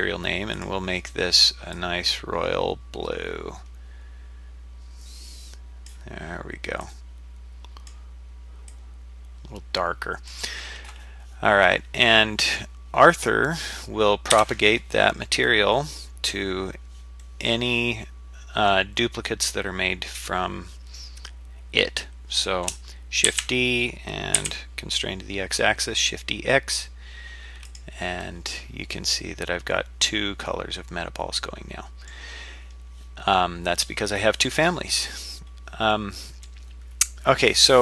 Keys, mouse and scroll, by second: 0.5 click, 11.5-11.9 scroll down 3, 12.1-12.6 middle drag, 13.0-13.5 scroll up 3, 13.5-14.3 scroll down 2, 14.3 KP_7, 17.2-18.7 middle drag, 23.3 shift+d, 28.2-32.1 middle drag, 32.7-33.3 scroll down 3, 33.2-35.2 scroll up 3, 35.2-35.9 scroll down 2, 35.9-36.5 middle drag.